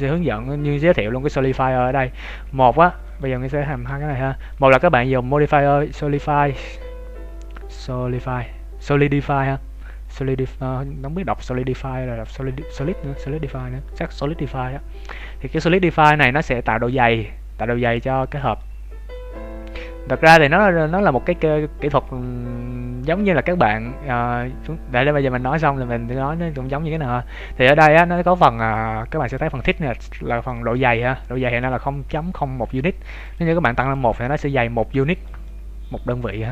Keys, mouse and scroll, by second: 1.8 middle click, 2.4 Tab, 3.0 right click, 3.8 h, 4.1 z, 4.5 right click, 5.5 middle click, 6.0 click, 18.5 middle click, 20.7 scroll up 3, 21.3 Tab, 22.0 Tab, 22.3-23.1 scroll down 1, 23.1-23.5 scroll down 2, 23.4 Tab, 24.1 Tab, 24.7-25.2 scroll up 1, 25.4 scroll up 1, 26.5 scroll up 6, 26.8-27.5 scroll down 3, 27.3 scroll up 1, 28.7 click, 33.2 click, 34.1-34.4 scroll down 7, 35.0 shift+middle click, 35.4 middle click.